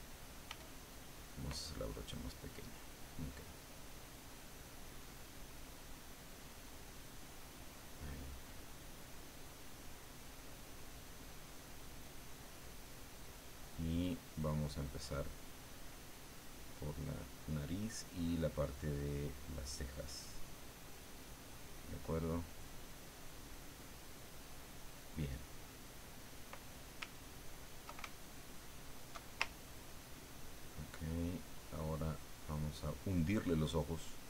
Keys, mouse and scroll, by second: 0.5 f, 1.2 click, 3.5-7.8 drag, 7.9 click, 8.6 click, 9.1 click, 9.6 click, 10.0-14.4 drag, 14.5 click, 15.9-18.9 drag, 19.0-21.7 drag, 21.8-26.6 middle drag, 28.4 alt+click, 29.4-33.8 ctrl+alt+drag, 33.9-34.2 ctrl+drag.